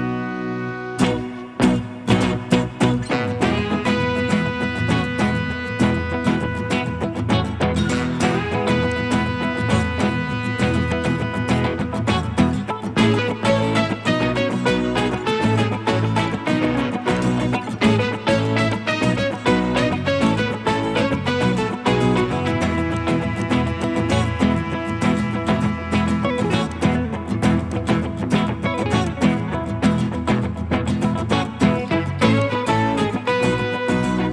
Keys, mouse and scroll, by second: 0.3 Escape, 1.8 middle click, 14.1 middle click, 23.4 double click, 24.3 scroll up 1, 25.0 middle click, 28.7 typing.